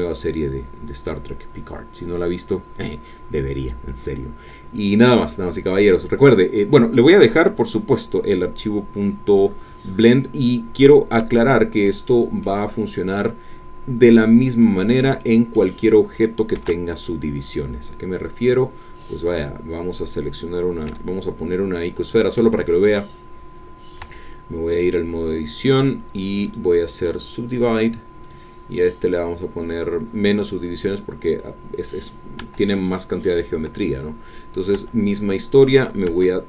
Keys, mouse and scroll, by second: 4.5-4.9 scroll down 2, 5.0-6.9 middle drag, 11.2-11.6 scroll down 1, 11.8 middle click, 12.7-13.2 scroll up 1, 13.4-13.8 scroll up 1, 13.8-14.2 scroll down 1, 14.2 scroll up 1, 14.4 middle click, 15.2 shift+middle click, 16.6 shift+a, 18.9 click, 20.9 g, 22.0 click, 22.5 shift+middle click, 23.2 shift+scroll up 1, 23.5 middle click, 24.1 Tab, 26.4 right click, 27.0 click, 28.2 click, 29.6 click, 32.4 Tab, 33.6-34.0 scroll up 2, 34.2-34.5 scroll down 2, 34.8 Tab.